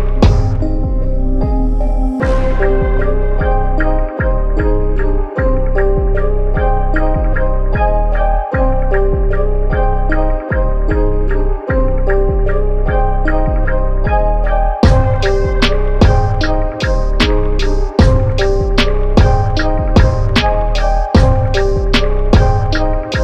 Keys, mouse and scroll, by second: 0.0-0.8 typing, 1.7 Tab, 2.8 click, 8.2 click, 9.0 Tab, 11.4 click, 11.4 click, 12.3 Tab, 15.3 click, 18.9-23.2 drag.